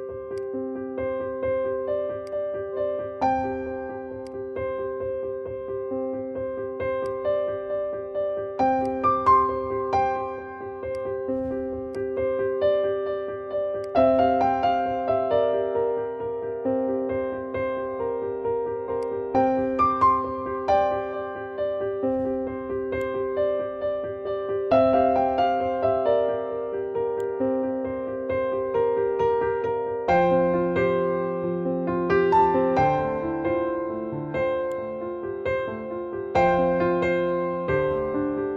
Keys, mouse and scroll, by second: 0.2-8.8 drag, 10.7 click, 18.9 click, 22.8-26.2 drag, 27.1-34.6 drag, 34.6-38.5 drag.